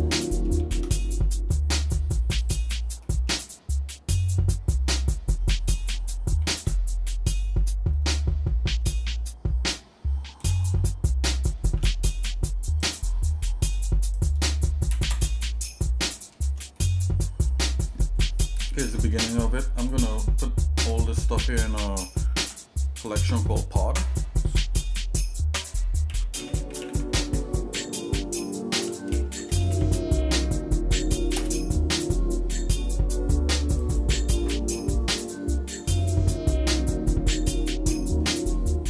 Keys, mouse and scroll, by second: 0.2 middle click, 0.6 shift+a, 3.0 middle click, 6.5 shift+c, 7.9-8.3 scroll up 2, 10.4 g, 14.2 click, 16.1 shift+middle click, 16.8 middle click, 20.1 click, 20.8 shift+click, 21.8 middle click, 22.4 m, 36.0 click.